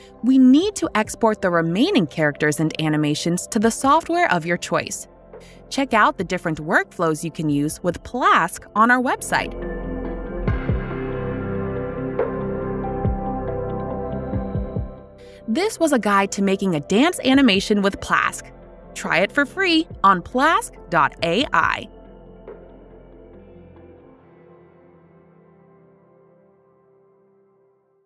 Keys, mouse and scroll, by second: 2.7 click, 6.2 right click, 9.5 click, 11.5 click.